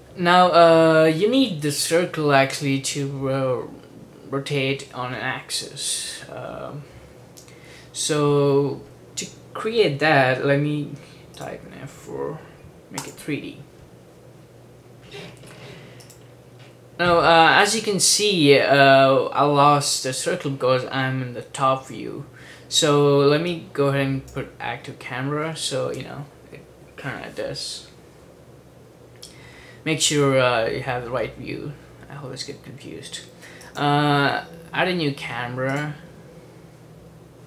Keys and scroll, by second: 11.8 F4.